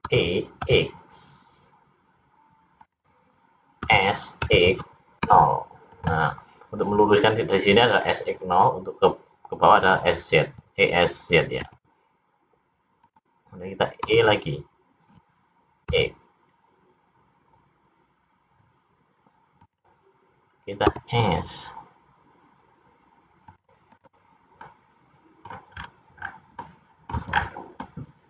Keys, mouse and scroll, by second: 0.1 e, 3.7 s, 11.6 s, 14.1 e, 20.9 s, 24.6 middle click, 25.7-26.3 scroll up 3, 26.3-26.6 scroll down 3, 26.7 middle click, 27.5-27.9 scroll down 1, 27.9 middle click.